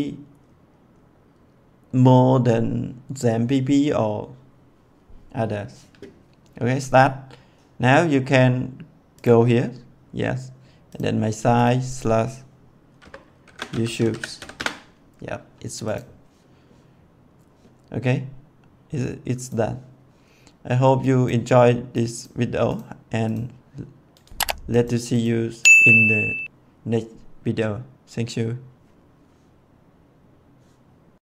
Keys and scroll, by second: 12.9-14.3 typing, 14.4 Return.